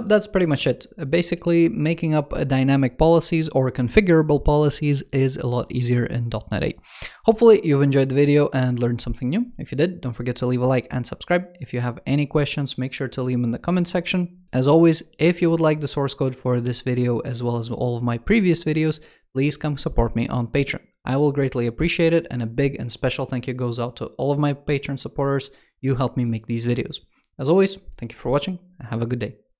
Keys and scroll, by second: 20.7-21.5 typing.